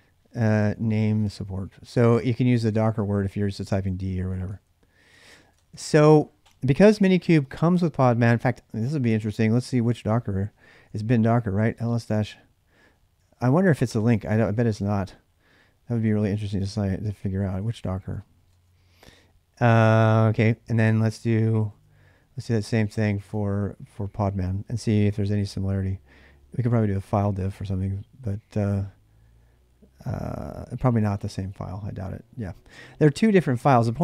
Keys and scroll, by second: 0.0-5.5 typing, 3.7 ctrl+[, 5.0 ctrl+[, 5.3 Return, 6.6 ctrl+a, 6.8 ctrl+a, 9.2-18.8 typing, 20.0-25.7 typing, 30.0-31.7 typing.